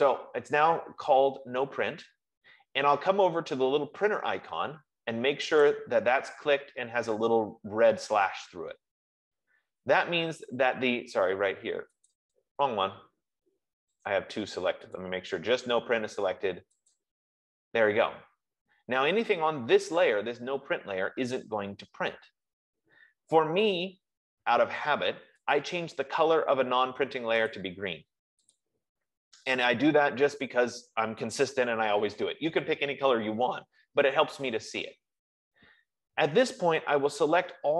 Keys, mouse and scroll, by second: 1.1-1.8 typing, 5.7 F15, 6.1 click, 12.5 click, 14.4 click, 15.4 click, 17.3 click, 25.8 click, 27.8 click, 29.1 click.